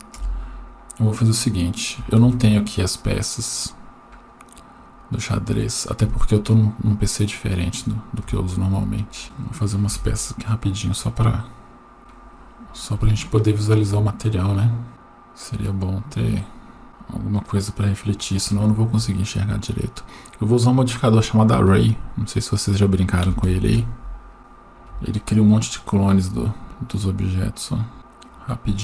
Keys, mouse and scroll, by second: 0.2 KP_0, 1.2-1.7 scroll up 2, 1.7 scroll down 1, 2.2 shift+a, 8.2 KP_1, 9.2-9.7 scroll up 1, 9.7 shift+middle click, 9.7 scroll up 1, 9.9 g, 12.0-12.9 scroll up 6, 12.0 KP_0, 13.1 shift+middle click, 14.9 g, 16.8 click, 17.3-21.1 drag, 22.6-23.7 drag, 24.4-28.8 drag.